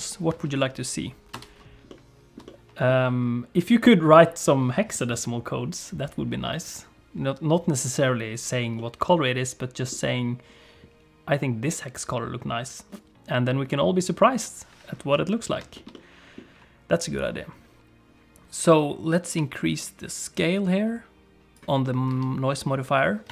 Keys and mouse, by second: 0.0 ctrl+space, 1.4 space, 1.9 middle click, 2.5 shift+middle click, 8.7-9.9 middle drag, 12.1 click, 15.7 shift+middle click, 15.9 middle click, 19.4-21.5 drag, 22.1 space.